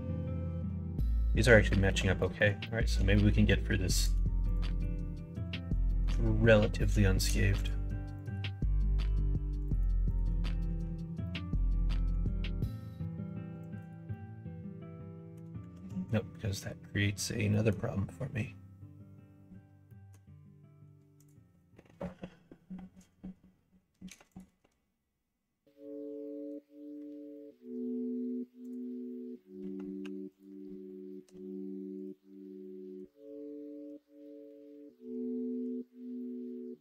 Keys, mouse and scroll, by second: 0.4 shift+click, 1.2 f, 1.6 shift+middle click, 2.1 middle click, 2.6 shift+middle click, 3.0 middle click, 3.9 click, 5.3 f, 5.8 middle click, 6.6 click, 7.5 click, 8.1 click, 10.0 shift+click, 10.5 middle click, 11.2 middle click, 12.2 ctrl+r, 14.1-15.3 middle drag, 17.4 middle click, 19.9 middle click, 21.1 click, 24.2 click, 28.6 click, 30.0 3, 30.3 click, 31.2 x, 33.1 middle click.